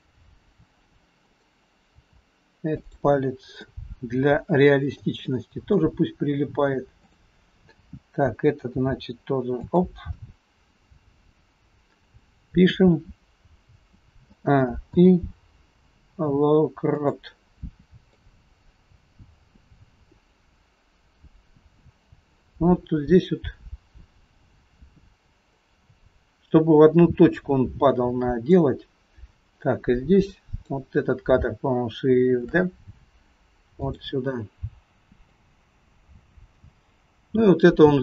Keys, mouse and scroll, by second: 1.2 click, 2.1 r, 3.3-4.1 scroll down 3, 3.7 middle click, 5.3 shift+middle click, 7.1 click, 8.7 r, 11.0-11.8 scroll down 6, 14.3 a, 14.9 i, 18.2 click, 30.3 click, 32.5 shift+d, 35.5 click.